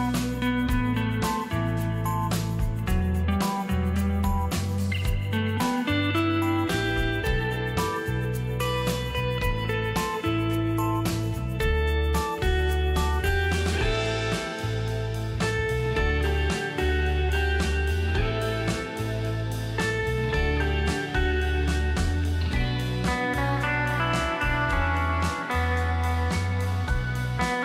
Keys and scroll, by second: 5.8 alt+space, 8.0 ctrl+alt+shift+d, 8.2 ctrl+alt+shift+d, 8.4 ctrl+alt+shift+d, 8.5 ctrl+alt+shift+d, 8.7 ctrl+alt+shift+d, 8.8 ctrl+alt+shift+d.